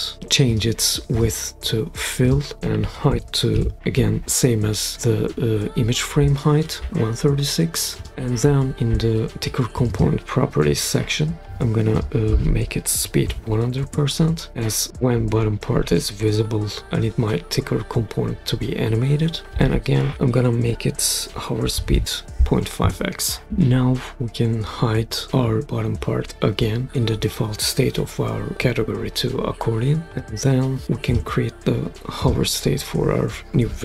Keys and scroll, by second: 2.5-4.0 typing, 12.9-13.2 typing, 13.8 Return, 21.5-22.4 typing, 22.8 Return.